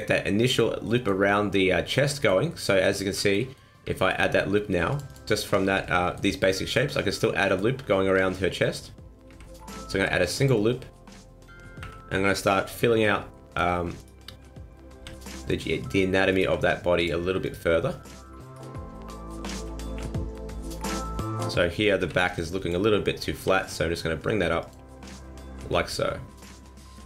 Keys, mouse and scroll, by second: 0.8 middle click, 2.0 middle click, 2.5 middle click, 3.4 middle click, 4.0 ctrl+r, 5.6 ctrl+z, 5.8 middle click, 6.4 middle click, 7.4 middle click, 9.3 ctrl+t, 10.0 ctrl+r, 11.8 KP_1, 13.0-14.0 scroll up 2, 13.3 shift+middle click, 14.0 right click, 15.0 g, 16.3 right click, 16.5 g, 17.4 right click, 17.6 g, 18.4 right click, 19.5 KP_1, 20.0 KP_3, 22.0 b, 23.4 g, 24.9 scroll down 2, 25.0 middle click.